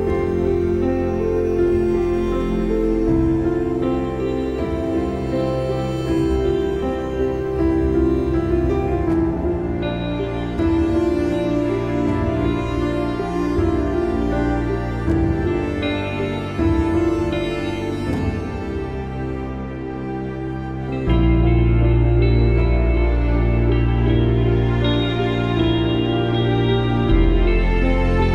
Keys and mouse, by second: 0.4 click, 1.5 click, 7.4 ctrl+=, 10.2 click, 13.1 alt+shift+click, 19.6 click, 23.2 ctrl+shift+[.